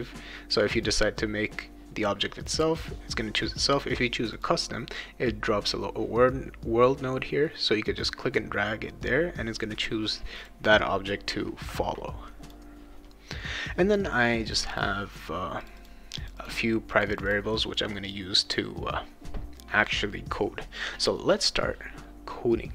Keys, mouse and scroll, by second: 0.8 click, 4.3 click, 9.7 click, 10.3 click, 12.4 click, 14.5 click, 14.7 click, 15.6 click, 15.8 click, 16.2 click, 16.4 click, 16.9 click, 17.1 click, 17.3 click.